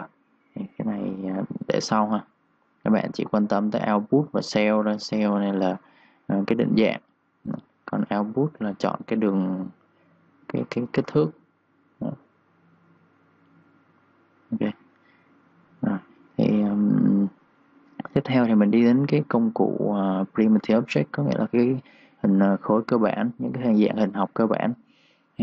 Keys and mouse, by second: 15.0-17.4 typing, 15.1 click, 16.0 click, 16.8 click, 19.4 click, 24.8 3, 25.0 click.